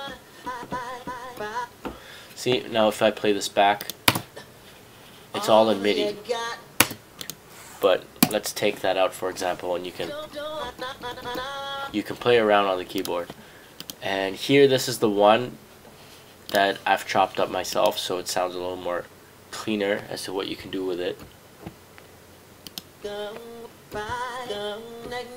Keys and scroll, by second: 3.9-4.6 typing, 6.0-6.9 typing, 8.3 BackSpace.